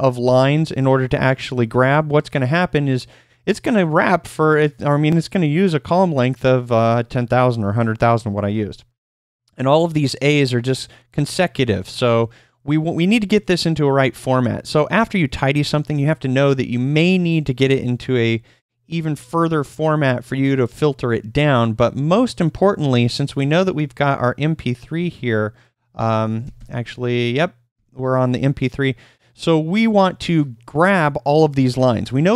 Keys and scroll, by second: 0.0-0.7 typing, 27.7 o.